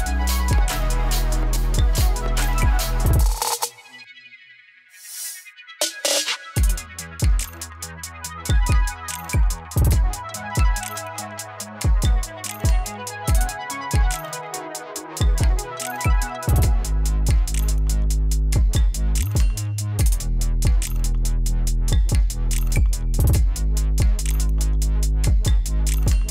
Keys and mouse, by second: 3.3 space, 4.9 click, 5.7 space, 7.9 j, 8.6 click, 9.3 ctrl+d, 10.3-12.2 typing, 12.7-17.9 drag, 18.2 ctrl+d, 18.9 p, 19.7-24.3 drag, 25.3 v, 26.1 ctrl+z.